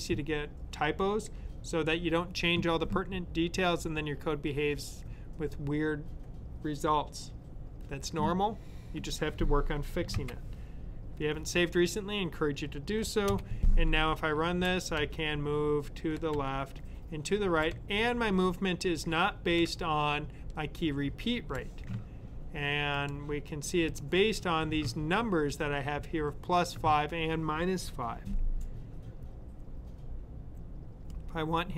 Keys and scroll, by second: 9.9 super+s, 14.1 Right, 17.6 typing, 19.5 typing.